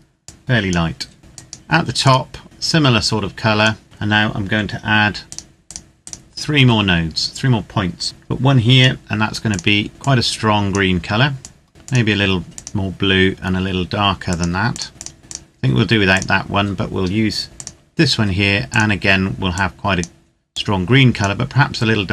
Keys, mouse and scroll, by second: 0.3 click, 2.4 click, 5.0 click, 8.0 click, 19.6 click, 20.6 click.